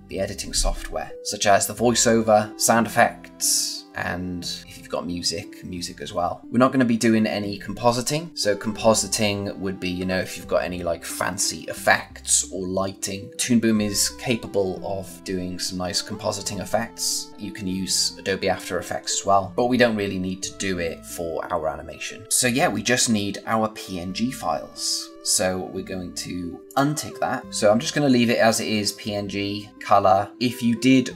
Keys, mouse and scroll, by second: 26.6 click.